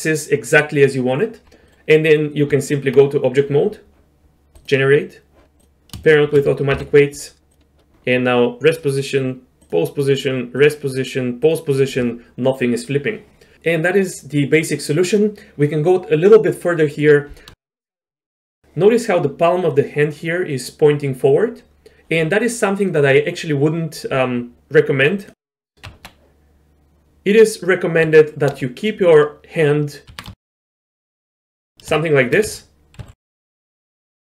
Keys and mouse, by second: 1.7 middle click, 2.5 Tab, 6.0 shift+click, 6.7 ctrl+p, 8.7-9.2 drag, 9.7-10.7 drag, 11.5 click, 13.5 middle click, 17.6 shift+drag, 17.7-18.2 shift+middle drag, 25.2 click, 25.8 Tab, 27.1 z, 28.5 1, 28.9 click, 30.1 r, 31.7 g, 32.0 shift+middle click, 32.5 z, 33.0 z, 33.2 middle click, 33.5 middle click, 33.6 middle click.